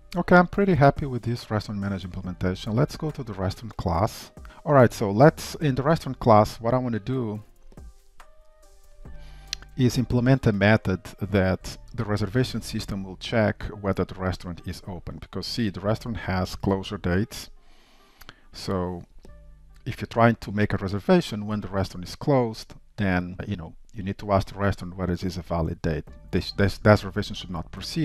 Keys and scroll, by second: 0.7 ctrl+shift+Down.